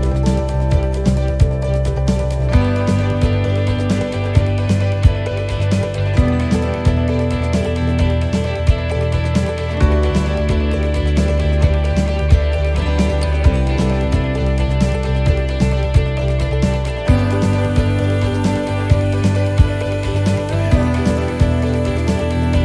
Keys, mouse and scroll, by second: 1.9 scroll up 1, 2.1 click, 4.6 click, 4.6 right click, 5.7 click, 8.6 middle click, 10.4 middle click, 13.4 shift+middle click, 14.2 middle click, 15.0 scroll down 1, 16.2 click, 16.6 click, 18.0 middle click, 18.5 shift+middle click, 18.8-19.1 scroll up 3, 19.1 middle click, 19.9 right click, 20.6 right click, 22.1 alt+shift+right click.